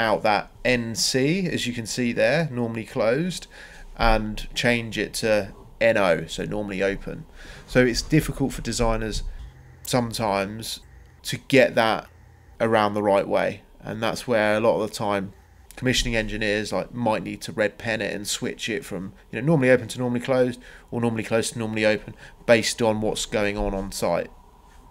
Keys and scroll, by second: 4.7 Delete, 6.5 m, 7.0 Return, 12.3 Escape, 19.7 Escape.